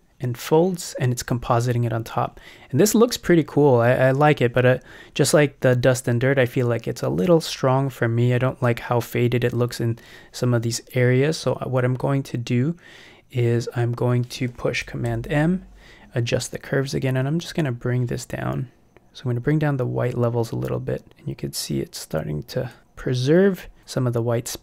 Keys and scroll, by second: 6.5 super+m.